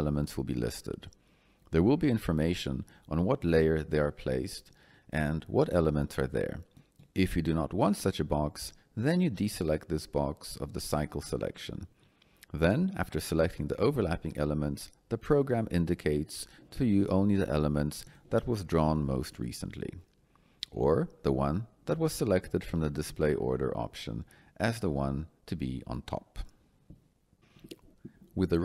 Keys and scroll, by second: 27.3 Escape.